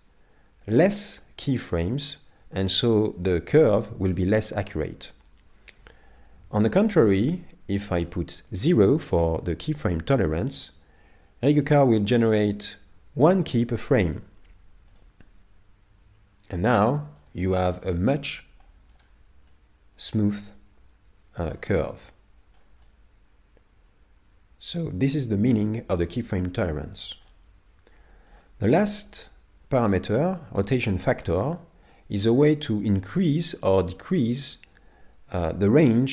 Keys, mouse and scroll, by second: 1.6 middle click, 6.7 click, 16.3-16.7 scroll down 2, 16.7 middle click, 17.6 middle click, 18.1-18.6 scroll up 5, 18.6 middle click, 19.6 click, 21.9 scroll down 5, 22.1 middle click, 23.0 click, 28.3 click.